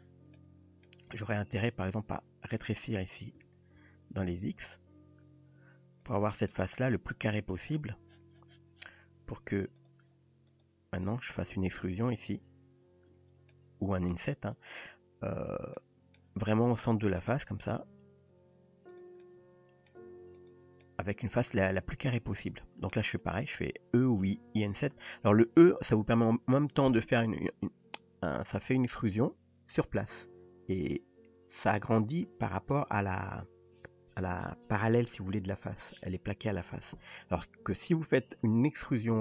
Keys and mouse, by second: 0.4-0.9 middle drag, 1.5 click, 3.4 s, 6.6 middle click, 9.8 drag, 10.6 click, 11.9 e, 13.5-14.1 middle drag, 15.8 middle click, 17.7 g, 19.2-19.9 middle drag, 20.4 click, 20.8-21.7 middle drag, 22.4-22.9 middle drag.